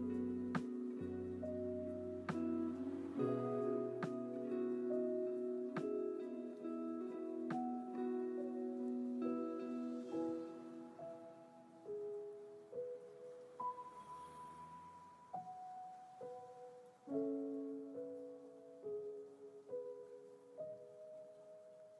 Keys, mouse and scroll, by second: 1.5 click, 3.0-5.6 right drag, 5.8 click, 7.3 ctrl+z, 9.3 ctrl+shift+z, 12.8 ctrl+z, 13.2 ctrl+z, 16.2 click, 18.3-20.4 scroll down 3, 20.4-21.5 drag.